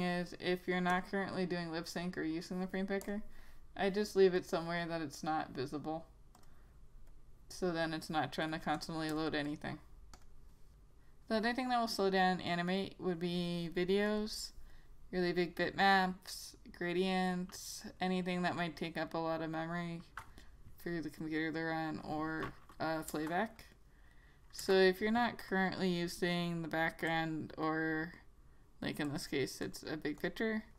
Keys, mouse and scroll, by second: 8.9 double click, 10.3 click, 14.2 click, 21.3 click, 23.2 Return, 24.7 Return, 25.6 click, 26.1 right click, 27.2 click.